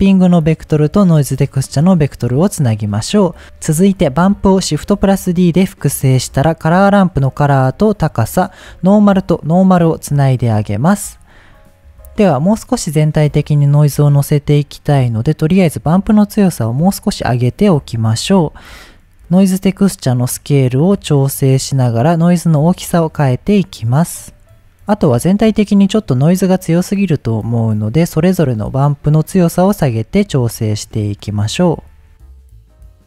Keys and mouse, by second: 0.1-1.5 drag, 1.9 middle click, 4.0 click, 4.8 shift+d, 5.9 click, 6.8-7.7 drag, 8.7-10.0 drag, 15.2-17.7 drag, 20.5-24.3 drag, 26.7-27.9 drag, 29.3-32.1 drag.